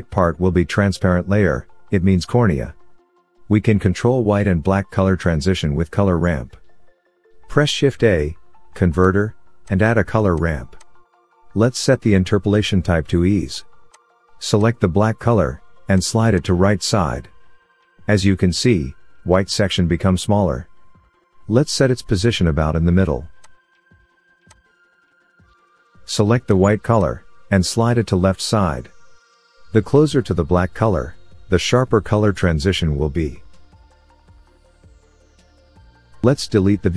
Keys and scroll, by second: 6.9 shift+a.